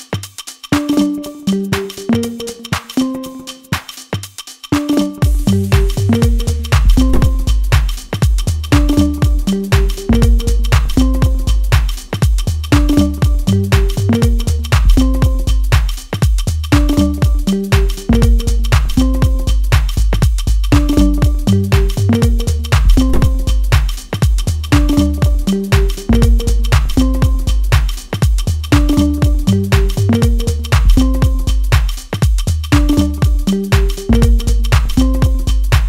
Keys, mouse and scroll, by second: 0.2 Tab, 0.6 scroll down 1, 1.0 shift+z, 1.2-1.7 scroll down 1, 1.7 middle click, 1.7 scroll up 2, 1.9 shift+middle click, 2.2-2.7 scroll up 1, 2.7 scroll up 1, 2.8 Tab, 3.3 middle click, 3.9 shift+z, 4.3 middle click, 4.7 click, 5.6 s, 6.8 g, 8.5 click, 9.1 click, 9.8 g, 10.9 s, 12.2 Tab, 12.5-12.9 scroll down 1, 13.0 shift+z, 13.2 middle click, 14.3 KP_7, 15.2 g, 16.6 middle click, 17.9 KP_7, 18.5 shift+z, 18.7 scroll up 2, 19.3 g, 20.1 middle click, 21.0 g, 22.4 r, 24.8 click, 24.8 a, 25.2-25.7 scroll down 3, 25.7 click, 26.0 click, 26.5 middle click, 27.5 click, 28.1 click, 28.4 click, 29.0 click, 29.9 click, 30.5 click, 31.0 middle click, 31.5 shift+z, 31.9 middle click, 32.4 Tab, 32.9 a, 33.8 e, 34.6-35.3 scroll up 3.